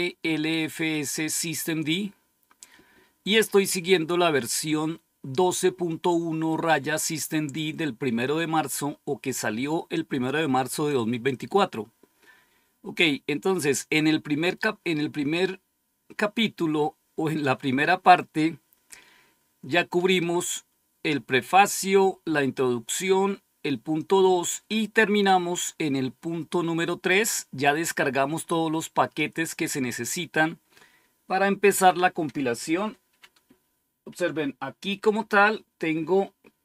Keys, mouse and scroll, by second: 0.8 click, 12.7-13.4 scroll down 1, 18.6-19.2 scroll down 1, 21.9-22.3 scroll down 1, 22.7-24.2 scroll down 3, 24.2-24.6 scroll down 1, 26.7-27.0 scroll up 2.